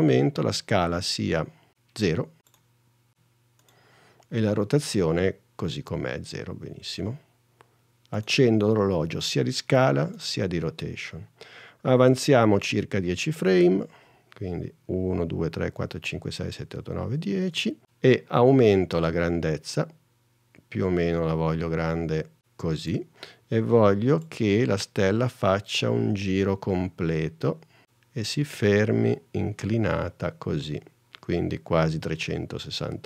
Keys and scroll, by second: 3.2 0, 14.9 super+Right.